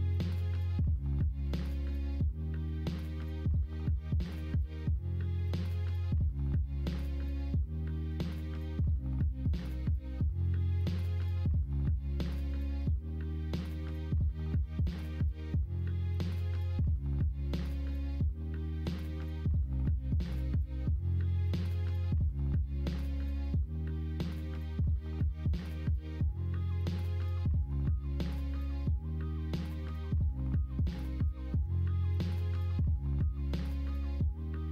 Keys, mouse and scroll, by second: 0.5 click, 1.4 2, 4.4-8.0 drag, 8.0 2, 9.5 s, 27.3 ctrl+z, 28.5 3, 30.8 middle click, 32.4 middle click, 33.3 p, 34.5 middle click.